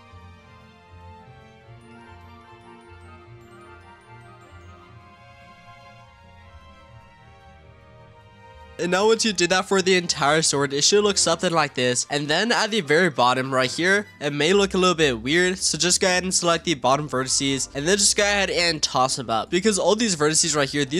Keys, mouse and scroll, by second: 0.0-0.4 typing, 0.0 click, 0.3 shift+middle click, 0.6 click, 0.8 scroll down 5, 0.8 scroll up 2, 0.9-1.4 scroll down 2, 1.2 shift+middle click, 1.4 scroll up 1, 1.5 click, 1.5-8.1 typing, 1.9 click, 2.1 shift+middle click, 2.3 click, 2.5 click, 2.7 click, 3.0 shift+middle click, 3.3 click, 3.8 shift+middle click, 3.9 click, 4.0 click, 4.5 click, 4.8 click, 5.1 scroll down 3, 5.1 shift+middle click, 5.2 scroll up 2, 5.7 click, 6.2 click, 6.6 shift+middle click, 6.7 click, 7.0 drag, 7.8 click, 8.3 scroll down 2, 8.4 scroll up 1, 8.4-8.7 scroll down 3, 8.6 shift+middle click, 8.7-12.1 shift+middle drag, 12.1-13.2 scroll up 6, 13.2-15.4 scroll down 2, 15.4 click, 16.1 shift+click, 17.2-17.6 scroll up 2, 17.7 g, 19.3 click, 19.5 g, 20.2 click, 20.4 g.